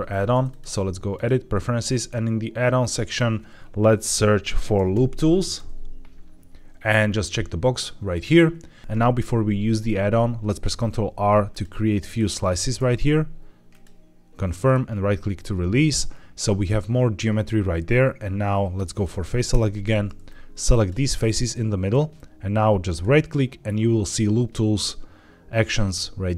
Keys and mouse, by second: 0.5-1.2 drag, 10.6 ctrl+r, 12.0 right click, 12.7 ctrl+r, 19.4 3, 19.5 4, 20.2 click, 22.8-26.3 right drag.